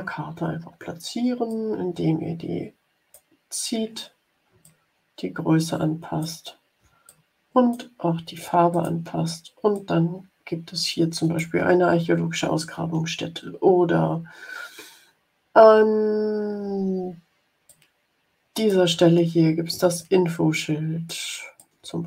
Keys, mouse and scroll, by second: 1.4-3.2 drag, 4.6-6.3 ctrl+drag, 7.0 click, 8.6 click, 9.7-11.5 drag, 17.6-18.9 drag, 19.9-21.3 ctrl+drag, 21.5-22.0 ctrl+drag.